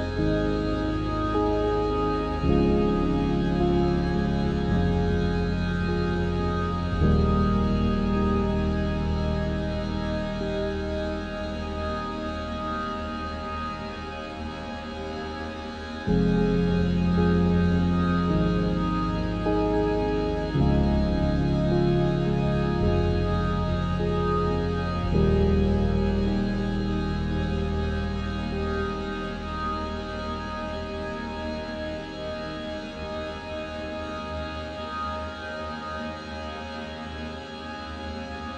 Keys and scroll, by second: 7.8 ctrl+0, 11.8 ctrl+alt+shift+e.